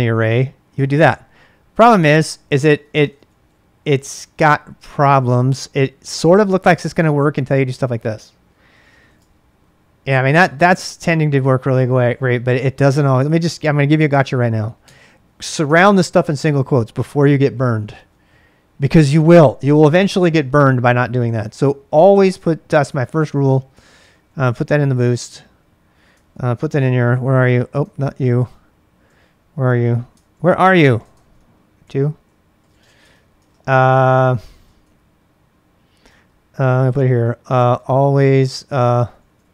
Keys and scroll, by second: 0.7 Return, 2.2-7.5 typing, 2.7 ctrl+[, 8.5-10.7 typing, 11.8 typing, 14.5-18.4 typing, 23.2 Return, 23.9 ctrl+a, 24.1 ctrl+a, 26.3 ctrl+a, 26.7 1, 27.9 ctrl+a, 28.1 ctrl+a, 30.2 ctrl+a, 30.7 ctrl+a, 31.2 ctrl+a, 31.8-34.6 typing, 35.8-39.5 typing.